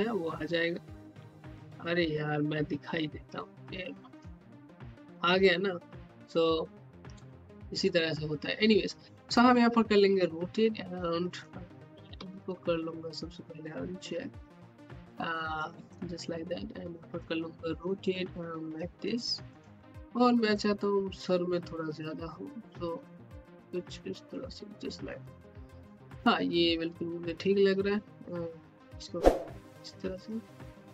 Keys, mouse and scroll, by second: 1.6 click, 1.7 space, 4.1 space, 5.0-7.1 drag, 10.1-12.1 drag, 12.1 ctrl+z, 13.2 ctrl+click, 15.5-19.0 ctrl+drag, 19.5 scroll down 1, 19.9 alt+middle click, 20.5-24.5 drag, 25.3-25.7 scroll up 1, 26.6 alt+middle click, 27.3-30.1 drag, 30.6 alt+middle click.